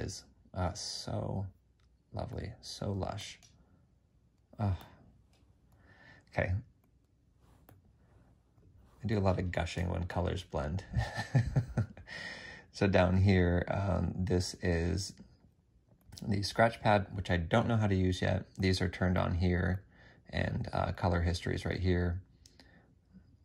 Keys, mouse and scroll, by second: 21.4 double click.